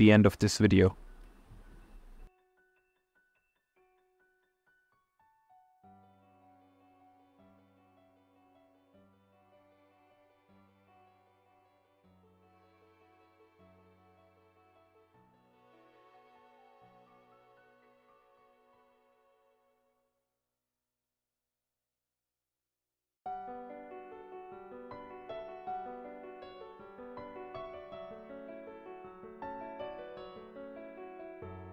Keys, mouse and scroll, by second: 3.7 ctrl+z, 3.7 Tab, 4.6-6.8 drag, 7.5 Tab, 9.8-10.9 middle drag, 11.2 middle click, 12.5 shift+click, 13.1 shift+click, 13.9 middle click, 14.6 shift+click, 15.5 shift+click, 17.2 shift+click, 18.0 middle click, 19.0 shift+click, 19.3 middle click, 20.1 shift+click, 20.5 middle click, 21.0 middle click, 22.5 click, 24.0 shift+click, 24.4 middle click, 25.3 click, 25.7 shift+click, 26.1 middle click, 28.9 click, 29.9 ctrl+z, 30.1-31.6 drag.